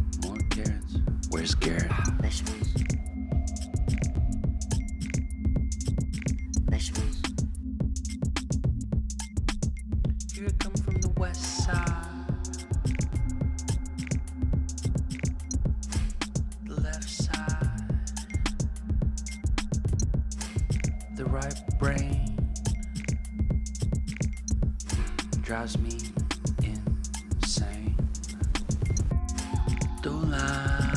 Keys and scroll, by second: 9.7 ctrl+t, 12.5 Return, 29.8 typing.